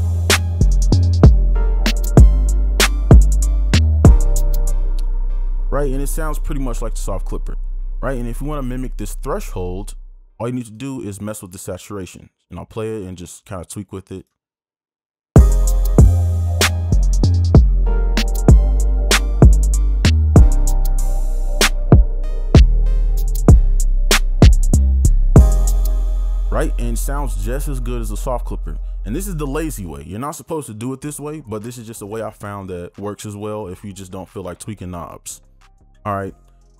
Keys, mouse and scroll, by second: 15.5 space, 25.7 space.